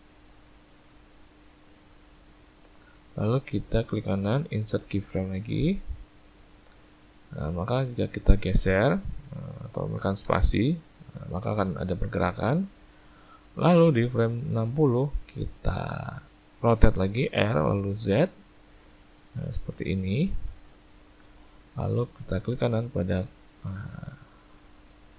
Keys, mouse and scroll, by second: 3.8 right click, 7.7 click, 10.4 space, 12.3 space, 13.3 click, 23.0 right click.